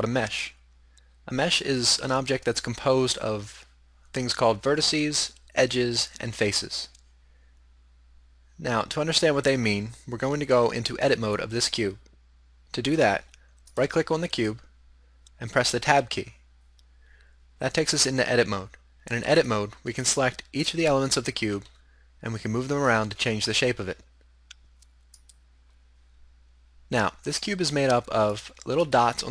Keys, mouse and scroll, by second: 13.8 right click, 16.0 Tab, 19.5-22.9 right drag, 21.7 g, 25.4-27.1 middle drag, 27.2 middle click, 28.4-29.3 middle drag.